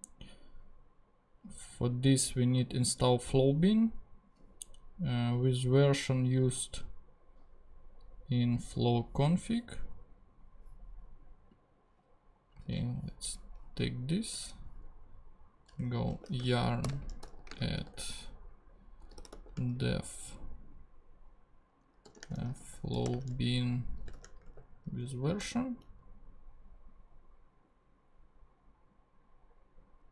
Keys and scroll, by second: 12.6 super+c, 15.9-19.8 typing, 22.0-24.1 typing, 24.5 shift+super+v, 25.3 super+v, 25.4 super+Return.